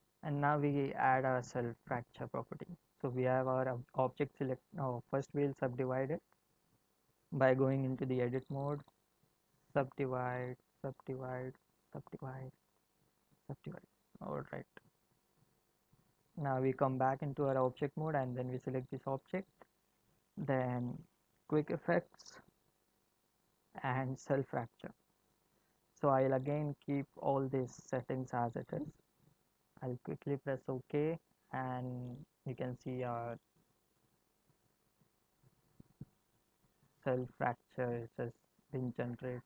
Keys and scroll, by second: 7.7 Tab, 16.7 Tab.